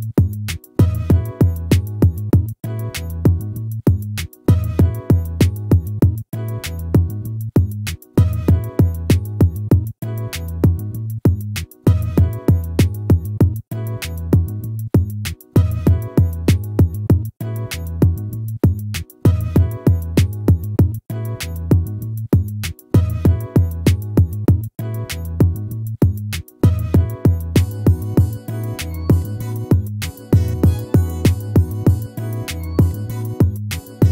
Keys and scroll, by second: 7.5 ctrl+z, 11.9 ctrl++.